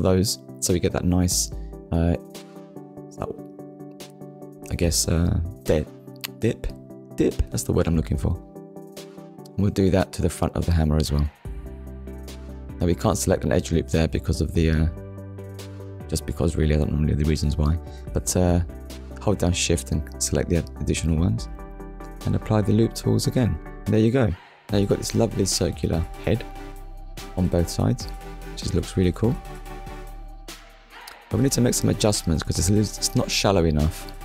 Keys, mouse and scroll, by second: 3.8 alt+click, 4.5 middle click, 8.0 right click, 9.5 click, 10.6 middle click, 11.7 alt+click, 12.9 alt+shift+click, 13.7 alt+shift+click, 14.8 alt+shift+click, 16.1 right click, 17.1 click, 17.9 middle click, 22.7 KP_1, 26.1 Tab, 29.1 KP_1, 30.3 scroll up 1, 31.0 shift+middle click, 32.5 shift+middle click.